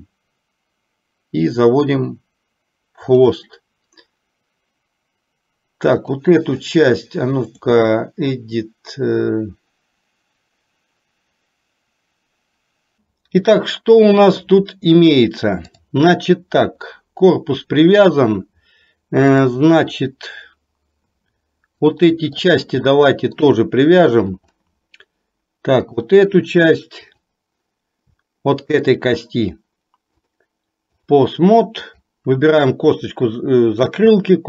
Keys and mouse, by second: 7.6-12.9 drag, 15.8 click, 16.9-18.1 middle drag, 19.5 click, 20.2-22.5 middle drag, 22.9 shift+middle click, 23.7 middle click, 27.2 click, 28.8 shift+click, 30.2 click, 31.9 click.